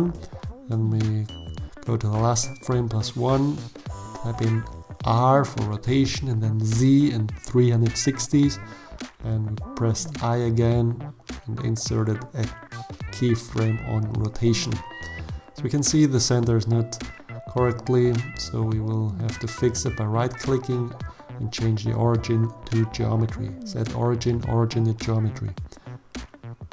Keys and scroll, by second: 1.0 r, 2.0 z, 2.4 3, 2.9 0, 3.3 Return, 4.7 i, 7.9 alt+a, 14.6 7, 15.2 shift+z.